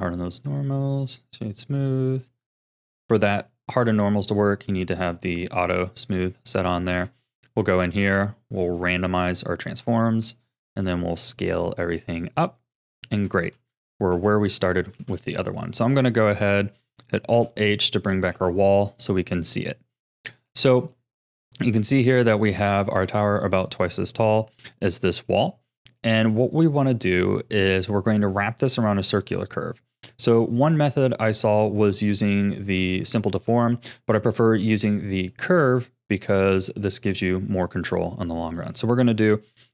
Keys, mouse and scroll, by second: 0.4-1.8 right drag, 1.8 click, 2.8-3.9 drag, 4.3-6.0 drag, 6.3 scroll up 2, 7.0 Tab, 8.0 space, 10.3 s, 12.8 a, 13.2 Tab, 13.9 scroll down 4, 14.1 a, 14.9 ctrl+s, 17.3 alt+h, 18.3 a, 18.7 click, 20.4 ctrl+s, 20.9-23.9 shift+middle drag, 24.7-26.4 shift+middle drag, 26.4 click, 30.2 click, 31.2-34.6 drag, 38.3 click, 39.6 shift+a.